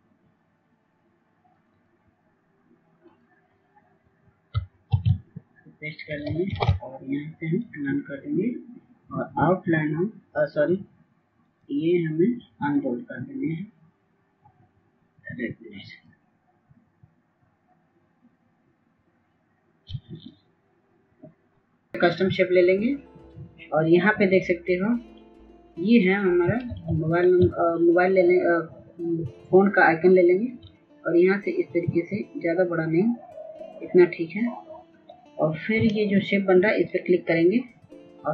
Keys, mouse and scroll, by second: 8.5 ctrl+v, 9.8 ctrl+a, 10.9-29.6 drag, 31.1 ctrl+space, 31.3 ctrl+click, 35.2-38.3 drag.